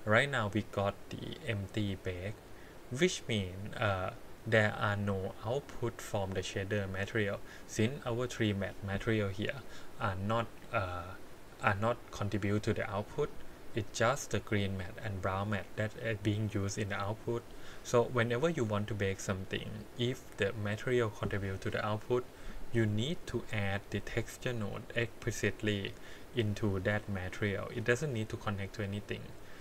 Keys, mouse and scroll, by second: 7.5 click, 14.2 click, 14.8 click, 15.7 middle click, 20.1 click, 23.1 click, 23.8-26.8 drag.